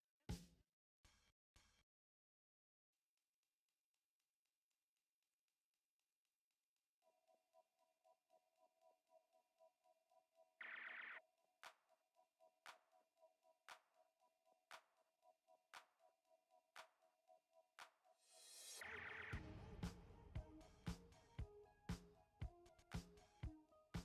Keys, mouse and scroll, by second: 2.1 alt+shift+click, 6.9 click, 10.5-14.0 drag, 14.0-22.6 alt+drag, 22.6 alt+click, 22.7-24.0 alt+drag.